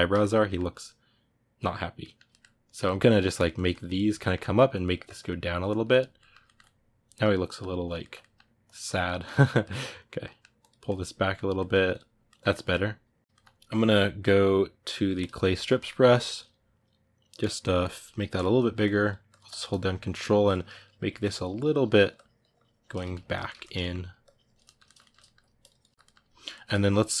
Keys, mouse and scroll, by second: 2.4 click, 2.6 middle click, 2.9-4.0 drag, 4.0 middle click, 4.3-5.9 drag, 5.9-8.4 ctrl+middle drag, 8.4 click, 8.6 middle click, 9.0 click, 9.4 middle click, 9.7 click, 10.0 middle click, 10.4 click, 10.6-11.7 middle drag, 11.7 click, 12.0-15.0 ctrl+middle drag, 15.0 click, 15.3-17.7 ctrl+middle drag, 17.7 f, 18.6-22.7 ctrl+drag, 22.7-24.0 ctrl+middle drag, 24.0 ctrl+click, 24.4 ctrl+middle click, 25.4 click, 25.7-27.2 ctrl+middle drag.